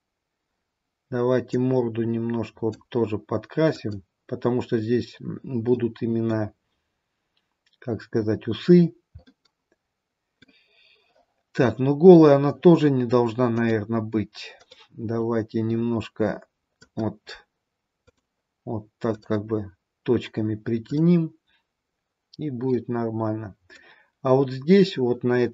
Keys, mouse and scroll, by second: 1.6 click, 3.8 click, 5.7 middle click, 9.2 middle click, 13.5 click, 16.8 click, 18.1 click, 20.0 click, 20.9 click, 22.6 middle click, 24.1-25.5 scroll down 1.